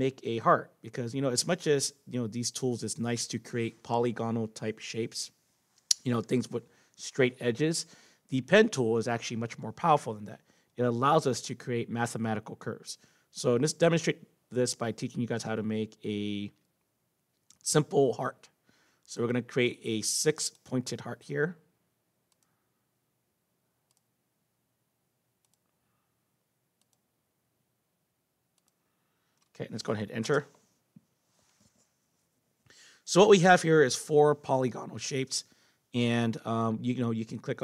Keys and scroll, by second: 30.2 Return.